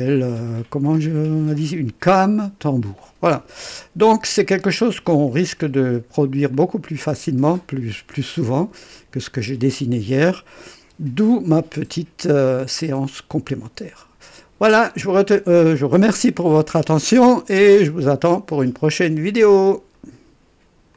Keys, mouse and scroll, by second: 3.0-4.3 drag, 4.5 right click, 5.1 click, 6.5-11.6 drag, 12.7-14.9 drag, 20.0 right click, 20.9 click.